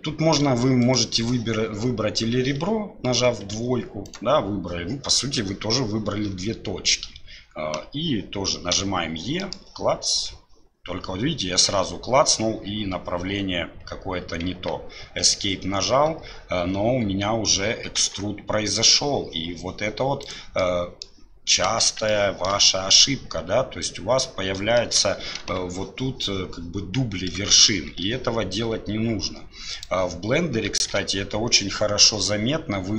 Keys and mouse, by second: 20.6 middle click, 22.1 shift+middle click, 24.8 shift+click, 25.4 KP_7, 27.5 shift+click, 28.1 e, 30.9 1.